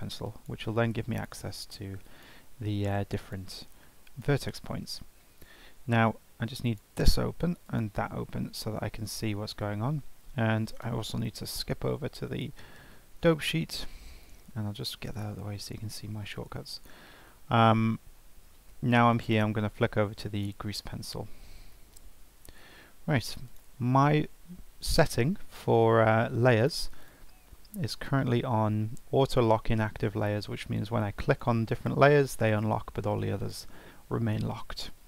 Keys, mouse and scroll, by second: 0.2 click, 1.1 click, 2.0 click, 3.1-5.3 drag, 6.6-7.7 drag, 11.9 shift+F12, 15.1-18.2 drag, 19.1-22.2 drag, 22.2-23.0 scroll down 2, 23.0-23.5 scroll down 1, 23.5 click, 26.6-30.9 drag, 31.3 click, 31.7 click, 33.4 click.